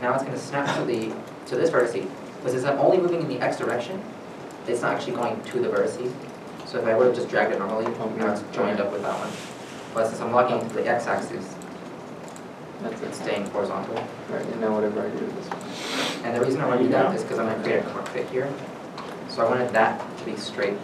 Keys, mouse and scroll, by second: 6.3 x, 6.3 right click, 7.1 g, 9.7 right click, 10.4 g, 11.0 g, 13.9 x, 15.1 shift+middle click, 16.5 middle click, 16.9 shift+middle click, 17.0 3, 17.5 middle click, 18.2 middle click.